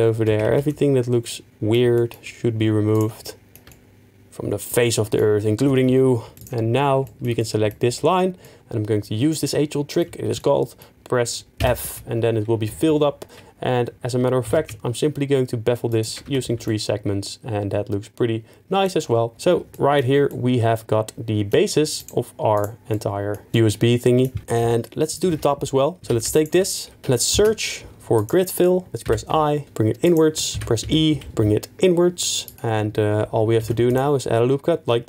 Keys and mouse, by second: 0.5 ctrl+z, 2.9 shift+click, 6.3 shift+middle click, 6.4 alt+x, 7.4 middle click, 10.4 middle click, 14.2 ctrl+f, 14.4 ctrl+b, 16.2 Tab, 20.3 middle click, 22.1 right click, 24.7 middle click, 25.3 Tab, 26.0 2, 26.4 alt+click, 27.0 ctrl+z, 27.3 space, 29.1 i, 30.0 shift+click, 30.6 e, 30.8 z, 31.2 z, 32.4 click, 33.6 ctrl+r, 33.9 click.